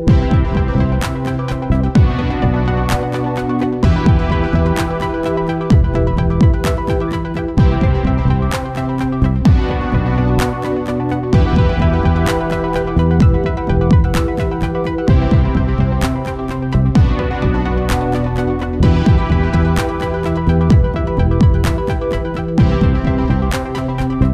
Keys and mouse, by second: 6.0-10.6 right drag, 9.6 t, 11.8-16.7 right drag, 15.3 t, 17.6-18.8 middle drag, 21.6 KP_1.